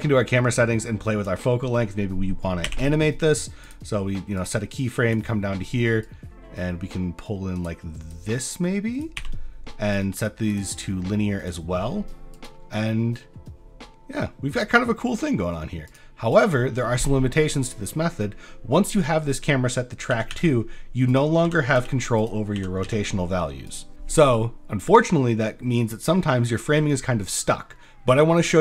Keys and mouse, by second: 4.4 click, 4.7 click, 6.0-7.6 drag, 8.2 click, 9.9 click, 10.1 click, 10.6-11.5 drag, 12.3 click, 12.8 space, 15.9 click, 16.3 click, 17.3 drag, 20.1 r, 20.3 y, 21.4 r, 21.8 z, 22.6 r, 22.8 x.